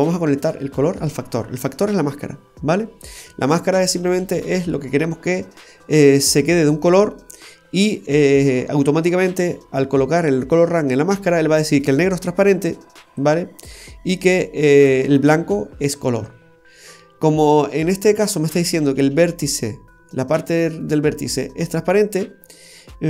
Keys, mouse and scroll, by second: 3.8-4.2 scroll down 2, 4.2 middle click, 13.1 click.